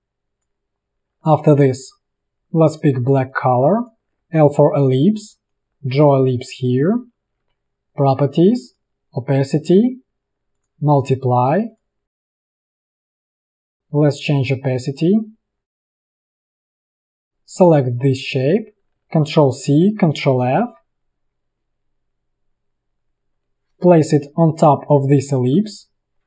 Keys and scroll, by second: 0.9 space, 4.3 l, 5.7 v, 7.5 a, 7.8 v, 17.0 space, 19.7 ctrl+c, 20.4 ctrl+f, 25.5 ctrl+].